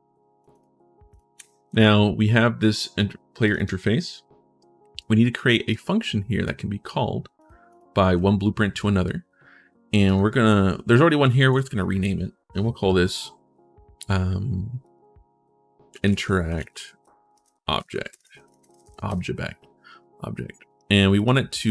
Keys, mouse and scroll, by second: 0.2 click, 0.3 click, 0.9 click, 1.5 ctrl+shift+s, 3.2 click, 3.4 click, 4.3 right click, 5.1 right click, 5.8 right click, 7.2 click, 7.5 click, 9.8 click, 15.6-18.6 typing, 20.9 click.